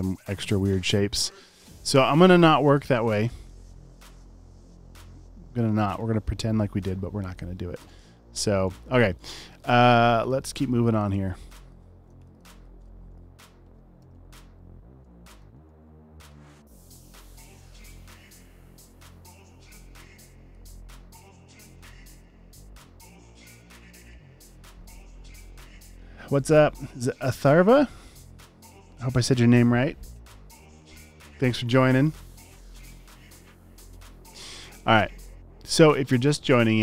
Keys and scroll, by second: 0.8 alt+super+space, 3.1 space, 3.2 space, 4.7 space, 5.4 space, 9.1 alt+super+space, 11.3-12.8 typing.